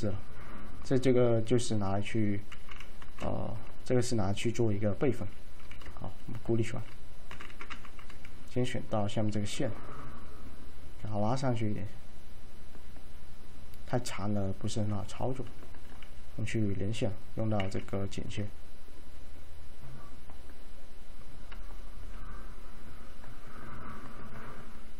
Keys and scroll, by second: 2.7 p, 3.1 F3, 5.7 a, 7.4 F3, 7.8 F4, 16.1 alt+c.